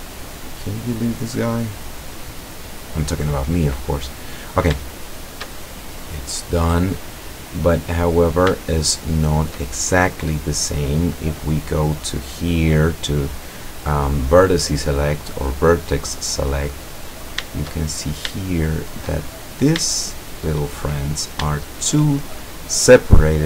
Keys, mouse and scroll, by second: 0.3 click, 2.7 click, 5.0-5.6 shift+middle drag, 6.3-7.9 middle drag, 8.0-8.5 scroll up 1, 8.7-9.6 shift+middle drag, 11.5 click, 15.9 right click, 16.8-17.4 scroll up 1, 17.4-18.4 scroll up 1, 18.5-19.3 shift+middle drag, 19.6-20.0 scroll up 1, 20.0-21.1 shift+middle drag, 21.7 shift+right click.